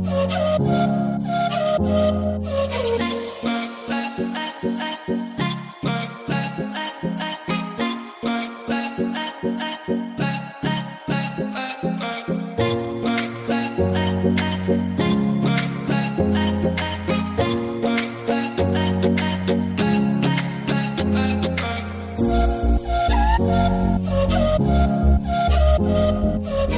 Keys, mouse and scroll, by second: 4.1 click, 4.8 space, 7.6 space, 8.7 click, 9.6-10.8 typing, 11.4 Return, 12.4 scroll down 1, 14.5-17.4 drag, 18.0-20.9 drag, 20.9 space, 23.0 scroll up 1, 25.2 scroll down 1, 26.3 scroll up 1.